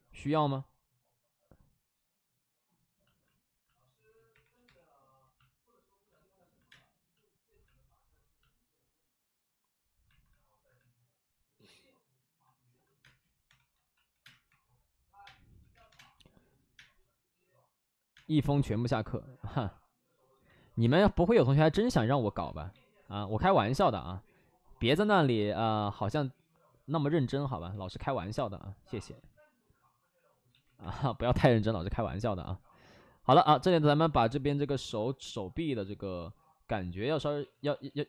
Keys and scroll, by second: 4.2 3, 4.6 3, 6.6 space, 12.9-16.7 typing, 18.0 space, 22.6 ctrl+z, 23.9 ctrl+z, 25.0 3, 27.6 ctrl+z, 28.1 2, 29.1 ctrl+z, 30.4 ctrl+z, 30.7 1, 31.2 2, 31.3 space, 36.6 space, 37.1 ctrl+z, 37.3 ctrl+z, 37.5 ctrl+z, 37.6 ctrl+z, 37.8 ctrl+z.